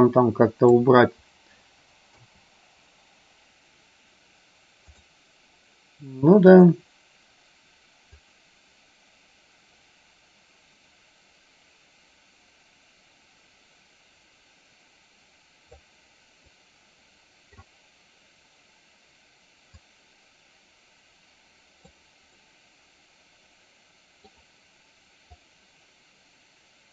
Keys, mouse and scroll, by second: 2.3 KP_0, 6.5 click, 8.4-16.2 drag, 16.7-17.8 middle drag, 20.0-22.6 drag, 22.6-24.6 middle drag, 25.4-26.9 drag.